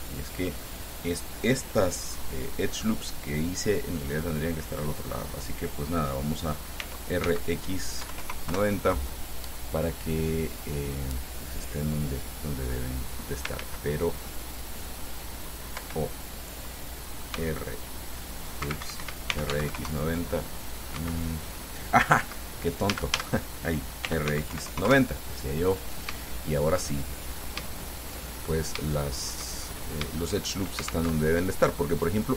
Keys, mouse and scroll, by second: 7.0 r, 7.5 x, 8.2 KP_9, 8.4 KP_0, 8.7 KP_Enter, 10.2-11.4 drag, 11.4-11.8 scroll down 2, 11.9-13.9 drag, 13.8 ctrl+z, 16.0 o, 17.6 x, 18.9 Escape, 19.3-20.2 typing, 21.2 Escape, 23.2-25.0 typing, 25.1 KP_Enter, 26.5 shift+click, 27.5 click, 28.0-29.7 shift+drag, 29.8-30.1 shift+scroll up 1, 31.4 alt+Tab.